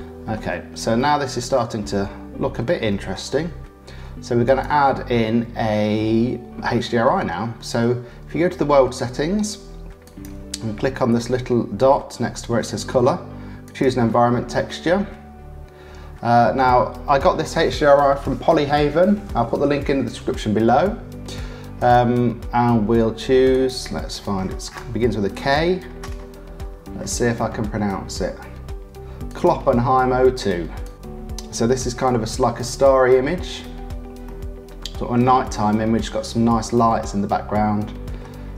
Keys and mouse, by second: 0.2 click, 0.3 middle click, 0.5 middle click, 1.0 middle click, 1.2 middle click, 1.3 click, 1.4 middle click, 2.2 click, 2.3 middle click, 3.1 click, 4.4 click, 10.0-13.8 drag, 21.8 click, 34.3 click, 35.5 click, 36.3 middle click, 36.6-38.3 drag.